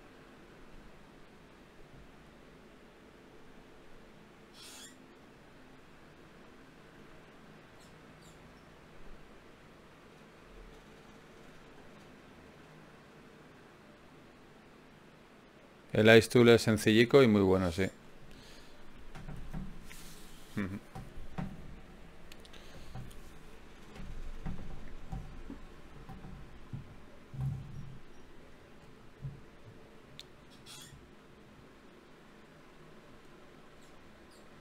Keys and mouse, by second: 16.6-18.4 drag, 18.4-19.9 middle drag, 21.6-24.2 middle drag, 24.7 middle click, 27.0 ctrl+Tab, 28.1-29.1 drag, 30.1 click, 31.3 click, 31.6-32.6 middle drag.